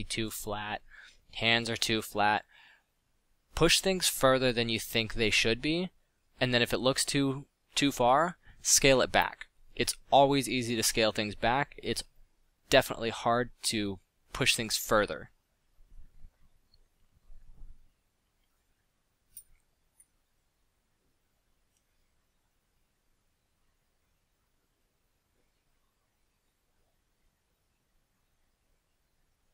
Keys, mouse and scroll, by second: 1.1-1.6 middle drag, 2.6 drag, 3.5 drag, 4.0 click, 8.5 click, 17.4 f, 18.9 f.